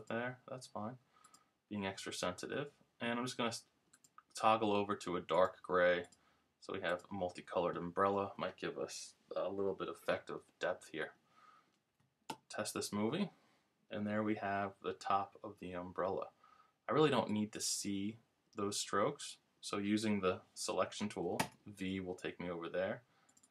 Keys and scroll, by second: 12.3 super+Return, 21.4 v, 21.7 v.